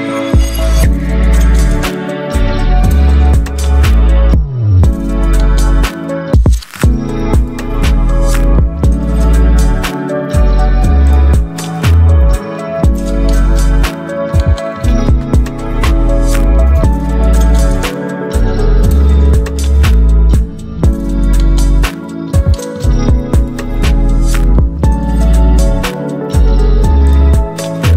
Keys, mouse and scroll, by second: 0.3 click, 1.4 alt+scroll up 1, 1.9 space, 2.0-7.3 drag, 7.3 space, 7.3-17.4 drag, 22.0 click, 24.6 right click, 25.8 click.